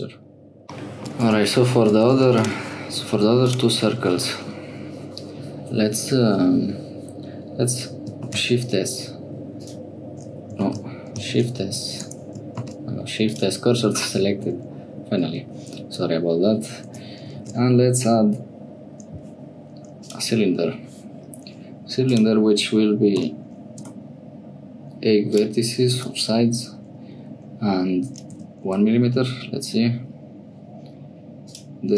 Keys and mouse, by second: 0.8 shift+middle click, 1.2 Tab, 1.9 1, 2.1 2, 2.3 click, 3.4 click, 8.2 shift+s, 10.7 ctrl+z, 11.3 shift+a, 12.5 shift+s, 14.3 shift+click, 15.7 Escape, 16.8 Tab, 17.3 shift+a, 22.0-24.9 drag, 25.3-30.8 drag, 31.4-31.9 drag.